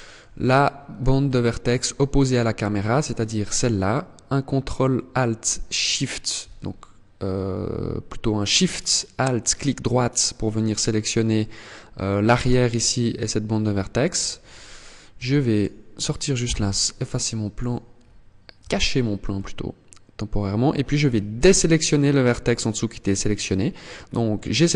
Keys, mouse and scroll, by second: 0.7 shift+middle click, 1.4-1.9 scroll up 2, 5.4 alt+shift+right click, 10.0 middle click, 10.9 middle click, 11.7 middle click, 13.3-13.8 scroll down 9, 14.7 Tab, 15.0 right click, 15.9 h, 17.1 right click, 17.5 scroll up 2, 18.1 Tab, 18.8 middle click, 20.8 shift+right click, 22.0 scroll up 2.